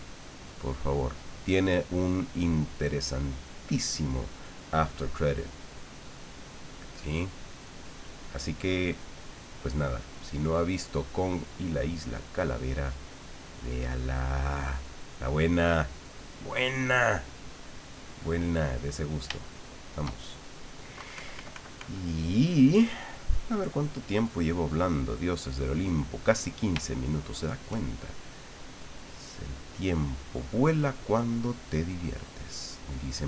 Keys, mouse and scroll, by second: 19.4 shift+middle click, 21.0 KP_Subtract, 24.3 click, 25.6 click, 27.1 shift+middle click, 28.9 click, 29.5 click, 30.2-33.2 drag.